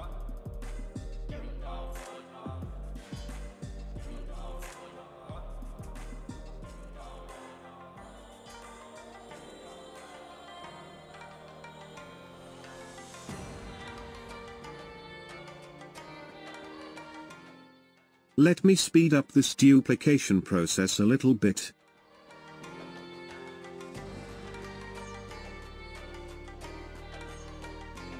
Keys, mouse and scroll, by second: 4.0 KP_0, 5.0-14.4 middle drag, 16.4-18.7 middle drag, 18.7 g, 22.3 g, 23.3 middle click, 24.0 KP_0, 24.7 g, 27.7 Tab.